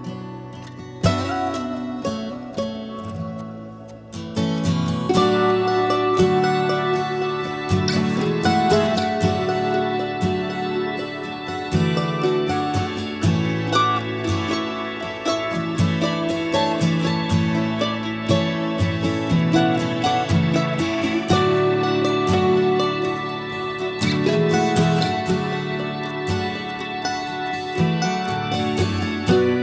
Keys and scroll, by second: 0.2 ctrl+a, 8.7 Escape.